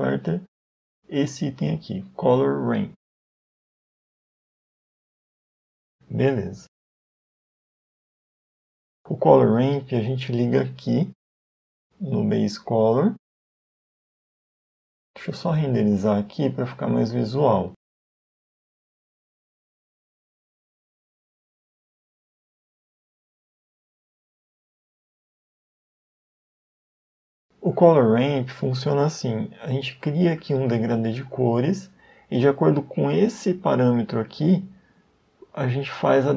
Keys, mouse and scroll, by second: 5.7 middle click, 6.5-7.1 scroll up 2, 7.2 middle click, 7.2-7.8 scroll up 1, 10.3 click, 15.4 middle click, 17.2 middle click, 17.2 click, 21.2 a, 22.0 right click, 22.0 a, 22.8 a, 23.4 a, 26.0 click, 27.1 middle click, 29.8 click, 33.9 click.